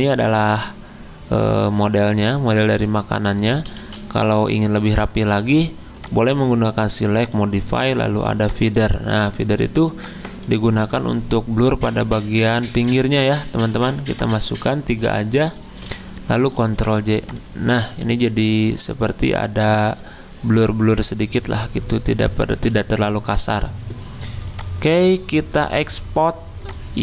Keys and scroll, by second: 3.8 ctrl+z, 12.9 3, 16.6 ctrl+j.